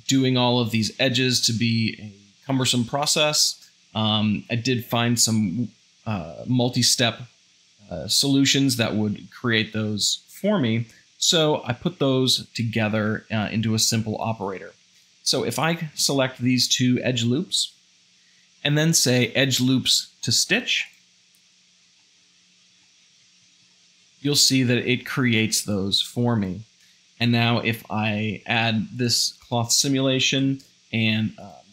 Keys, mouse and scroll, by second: 13.0 2, 15.0 alt+click, 15.7 alt+shift+click, 22.3 middle click, 22.4 shift+z, 26.9 a, 30.2 shift+Left, 30.4 shift+Left.